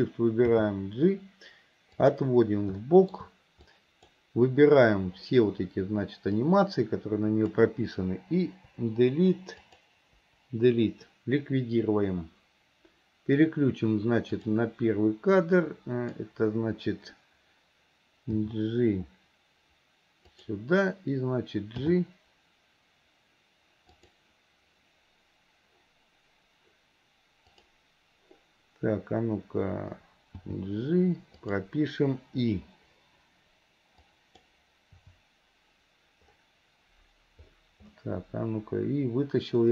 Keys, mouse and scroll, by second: 0.5 g, 2.8-3.2 shift+middle drag, 3.7-4.2 drag, 6.5-7.5 drag, 8.5 Delete, 9.6 click, 14.4 click, 15.6-16.2 drag, 18.4 g, 21.9 g, 27.6 click, 30.5 g, 34.1-34.5 drag, 34.9 i.